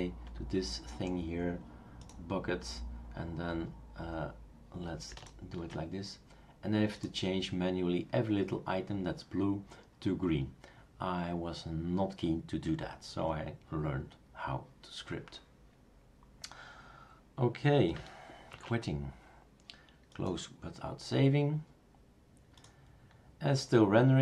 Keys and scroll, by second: 18.5 super+q.